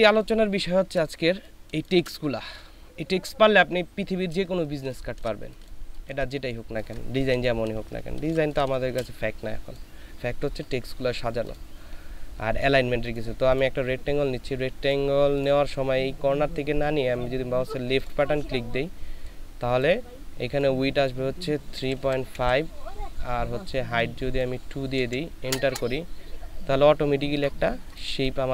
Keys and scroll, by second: 1.3 ctrl+space, 4.7 ctrl+space, 21.8 KP_3, 22.0 KP_Decimal, 22.3 KP_5, 25.0 KP_2, 25.6 Return.